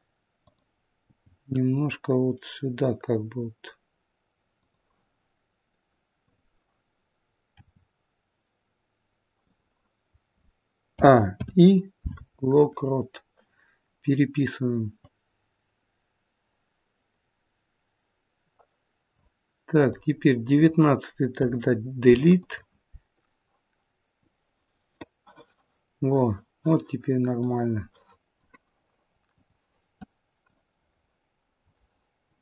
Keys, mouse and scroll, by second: 0.4 click, 1.1 g, 6.2 click, 7.5 r, 10.9 a, 11.3 i, 15.0 click, 19.8 click, 21.3 Delete, 24.2 click, 29.4 click, 30.5 click.